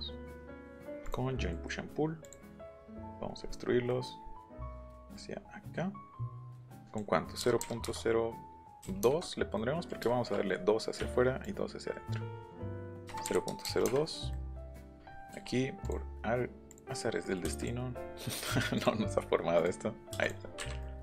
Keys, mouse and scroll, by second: 1.1 click, 1.5 middle click, 1.8 middle click, 2.2 click, 3.1 scroll up 1, 3.4-4.0 scroll down 3, 4.2 scroll up 1, 5.1-7.0 drag, 7.4 KP_0, 7.6 KP_Decimal, 7.8 KP_0, 8.8 KP_2, 9.6 middle click, 10.1 shift+middle click, 11.0 Escape, 11.4-12.5 drag, 13.0 KP_0, 13.2 KP_Decimal, 13.5 KP_0, 13.6 KP_2, 15.3 l, 15.8 click, 16.7 click, 17.5 space, 18.7 click, 19.6 click, 20.2 click, 20.8 middle click.